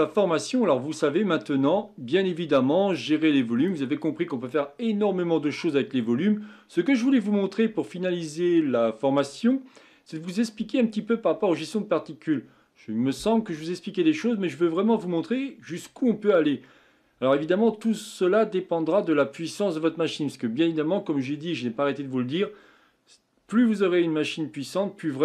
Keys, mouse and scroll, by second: 0.0-2.9 middle drag, 2.9-6.0 drag.